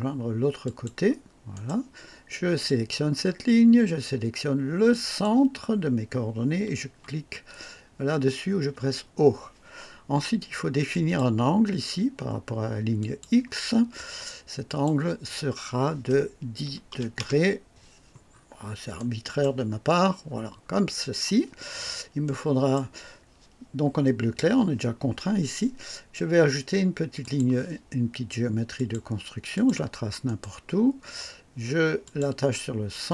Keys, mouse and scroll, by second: 0.6 click, 1.5 right click, 2.6 click, 4.9 click, 8.7 o, 10.9 click, 13.0 click, 14.6 click, 16.6 KP_1, 16.9 KP_0, 17.3 KP_Enter, 18.3 scroll up 1, 18.9 right click, 20.2-20.6 scroll down 2, 21.7-22.1 scroll up 2, 22.2-22.9 right drag, 27.2 click, 28.7 click, 29.5 click, 30.2 right click, 32.0 click.